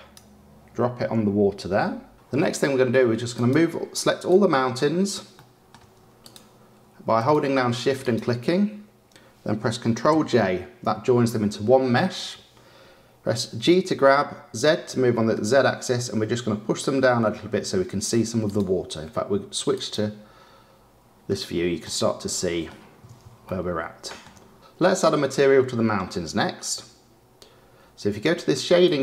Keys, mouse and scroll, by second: 3.3 click, 4.1 shift+click, 5.3-6.1 shift+middle drag, 6.1 shift+click, 7.1 shift+click, 8.0 shift+click, 10.4 ctrl+j, 13.6 g, 20.1 click, 21.9-24.5 middle drag.